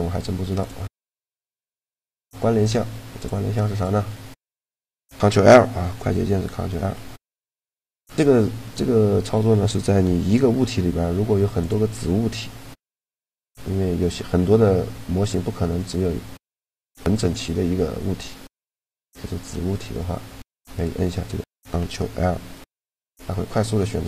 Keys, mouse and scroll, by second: 0.4-2.1 drag, 3.5-5.2 right drag, 6.2 ctrl+l, 10.3 shift+d, 11.6 shift+d, 14.0 g, 17.1-19.0 middle drag, 19.2 a, 20.4 click, 21.3 right click, 22.1 ctrl+l, 23.8 middle click.